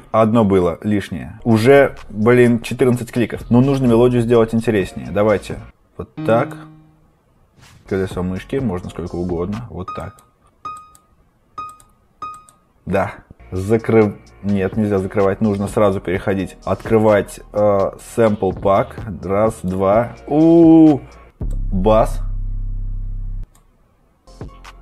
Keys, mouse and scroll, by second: 3.4 typing, 6.2 click, 7.8-8.4 scroll, 9.9 click, 10.7 click, 11.5 click, 12.2 click, 13.3-13.7 scroll, 17.8 click, 19.5 click, 21.3 scroll, 21.4 click.